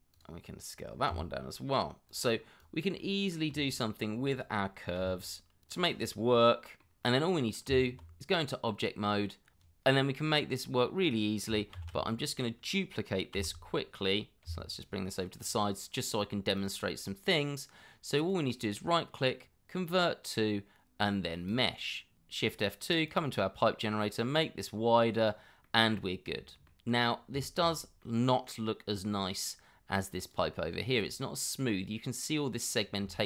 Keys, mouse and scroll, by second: 0.1 double click, 1.1 s, 2.5 middle click, 2.8 s, 3.5 r, 4.1 g, 5.8 middle click, 6.3 g, 7.0 r, 7.6 scroll up 1, 7.9 Tab, 8.3 scroll down 1, 9.5 Escape, 11.7 shift+d, 13.3 x, 14.4 y, 17.1-17.8 scroll up 1, 18.2 right click, 22.1 shift+2, 25.6 middle click, 27.0 scroll up 1, 27.4 shift+middle click, 27.7 scroll up 1, 28.0 middle click, 29.5 scroll down 1, 31.3 scroll up 1, 32.8 scroll down 1, 33.1 shift+middle click.